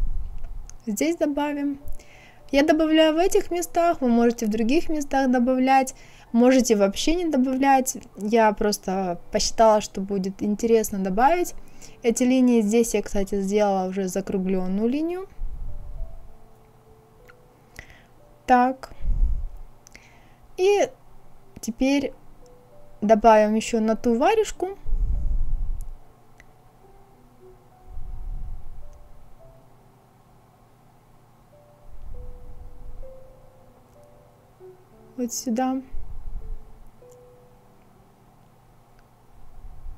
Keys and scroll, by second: 3.6 Escape.